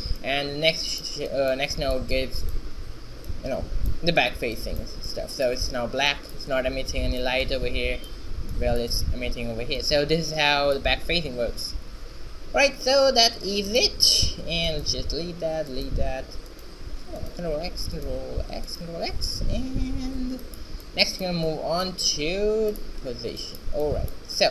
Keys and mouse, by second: 9.9-12.9 middle drag, 14.3-17.6 drag, 14.3 shift+x, 15.3 shift+x, 17.6 ctrl+x, 17.6 right click, 18.6 ctrl+x, 19.1 ctrl+x.